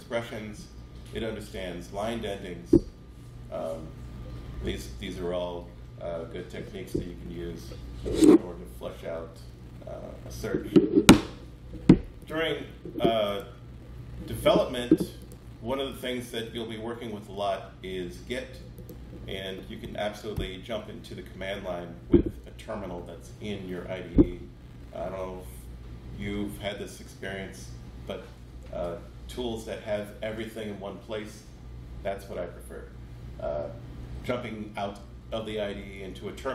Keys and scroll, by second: 20.3 alt+F12.